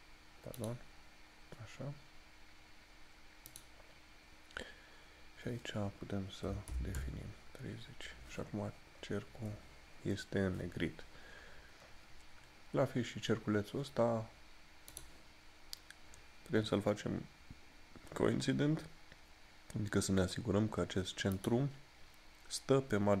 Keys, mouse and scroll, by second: 3.6 click, 9.1 scroll up 1, 15.0 click, 21.5 click.